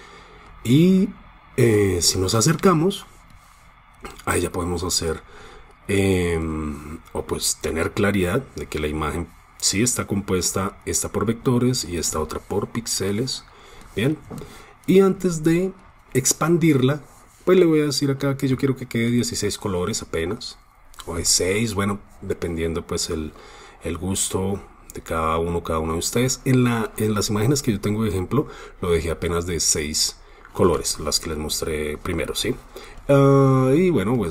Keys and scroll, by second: 3.3 super+space, 4.0 super+space, 4.7 super+space, 5.2 super+space, 12.3 super+space, 12.5 super+space, 12.6 super+space, 13.1 super+space, 13.2 super+space, 13.3 super+space.